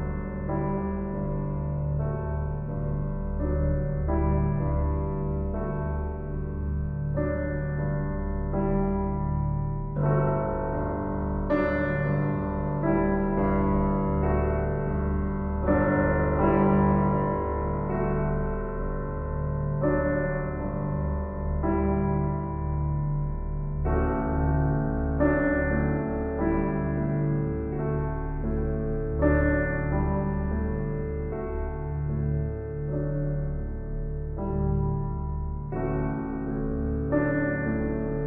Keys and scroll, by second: 18.8 ctrl+t, 36.7 ctrl+t.